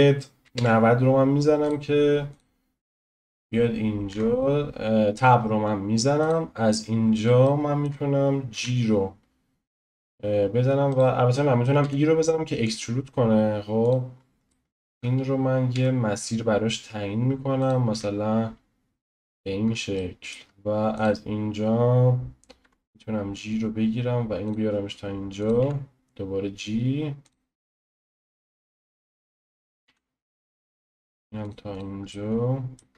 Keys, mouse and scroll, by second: 2.4 click, 3.3 click, 4.1 Tab, 5.4-6.3 scroll up 1, 6.3 click, 6.8-7.4 scroll down 1, 7.4-8.5 shift+middle drag, 8.5 g, 11.8 e, 14.1-14.5 scroll down 2, 14.5-15.7 shift+middle drag, 17.9 e, 19.9-21.0 shift+middle drag, 21.0 click, 22.6 g, 25.5 click, 25.6 g, 28.1 click, 28.2 g, 29.8 click, 29.9 g, 30.7 click, 30.8 g, 31.8 click, 32.1-32.9 shift+middle drag.